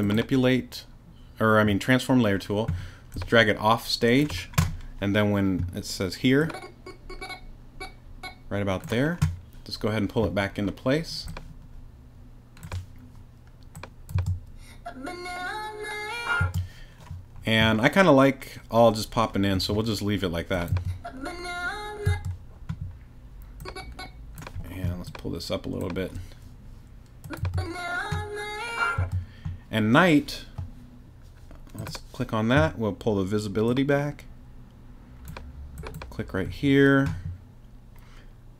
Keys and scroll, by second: 14.1 space, 16.4 space, 20.7 space, 22.0 space, 27.4 space, 29.0 space.